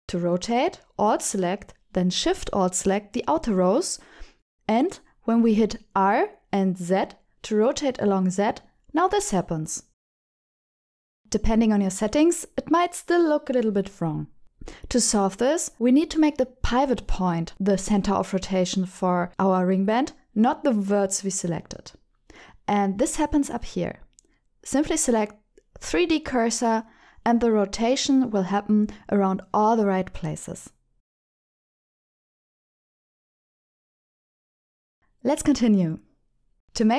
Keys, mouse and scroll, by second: 0.0 shift+s, 0.8 middle click, 4.5 alt+click, 5.5 alt+shift+click, 6.7-7.9 middle drag, 8.6 KP_7, 9.9 r, 10.0 z, 14.2 click, 14.3 ctrl+alt+shift+r, 23.5-27.4 drag, 30.9 r, 31.0 z, 32.2 z, 32.3 r, 32.4 z, 34.8 click.